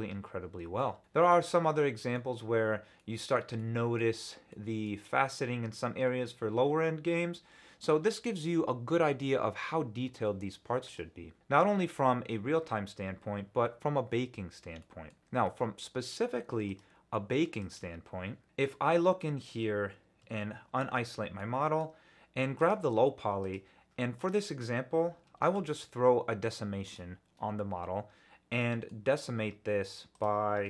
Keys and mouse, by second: 11.4 click, 14.8 middle click, 16.6-18.3 drag, 19.2 middle drag, 21.4-21.8 middle drag, 22.5 click, 23.5-26.9 drag, 28.6 drag, 28.7 middle click, 28.8 drag, 30.1-30.6 drag.